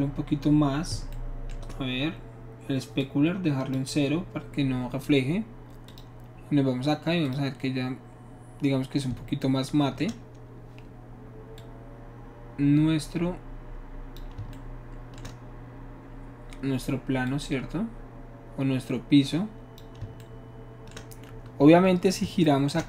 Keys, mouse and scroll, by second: 3.0 shift+middle click, 5.9 click, 7.3 click, 11.6-14.2 shift+drag, 17.3-19.8 shift+drag, 20.3-22.8 shift+middle drag.